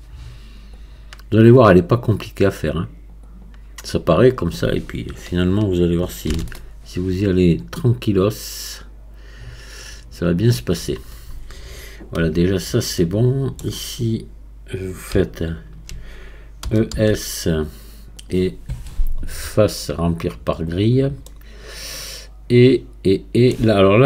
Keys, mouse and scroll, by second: 6.3 ctrl+r, 13.0-15.2 middle drag, 15.2-16.6 alt+drag, 16.6 e, 19.5-21.2 drag, 21.2-24.0 middle drag.